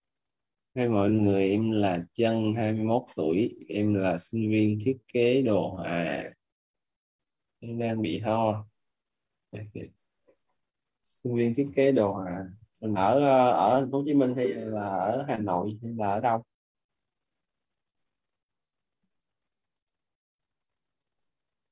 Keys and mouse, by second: 10.3 click, 13.2 <.